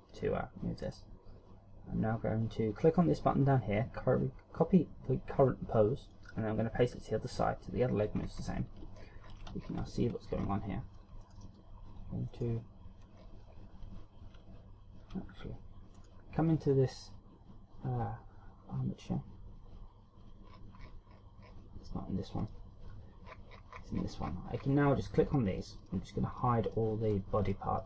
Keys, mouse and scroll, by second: 1.0 right click, 6.1 click, 7.1 click, 8.3-8.7 scroll up 3, 9.1-9.9 ctrl+scroll down 8, 10.5 scroll up 1, 11.4 right click, 12.4 right click, 13.4 scroll down 1, 16.1 right click, 20.7-22.5 scroll down 17, 22.5 click, 23.6-24.2 scroll down 5, 24.1 scroll up 1, 24.4-24.8 scroll down 4, 25.4 click, 25.9 click, 26.5 click, 26.8 click, 27.2 click, 27.6 click.